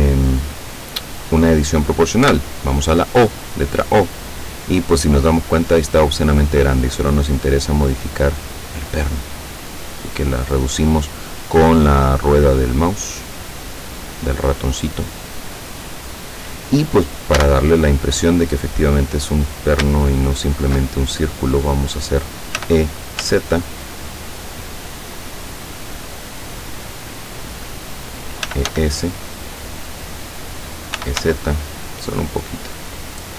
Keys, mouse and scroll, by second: 2.4 o, 3.8-5.4 drag, 5.4-5.8 scroll up 1, 6.0-6.4 scroll up 1, 6.6-8.0 scroll up 5, 8.3-8.6 scroll up 2, 9.2 scroll down 2, 9.9 scroll down 2, 11.4 scroll down 2, 17.5 a, 18.9 right click, 20.3 alt+shift+right click, 22.7 e, 23.3 z, 27.6 click, 28.3-29.3 typing, 30.1 click, 31.0 e, 31.3 z, 32.6 click.